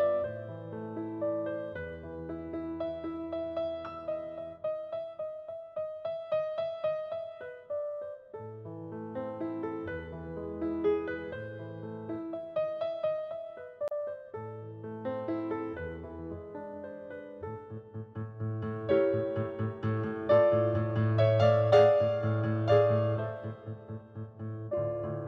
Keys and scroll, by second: 4.7 space, 21.1 space.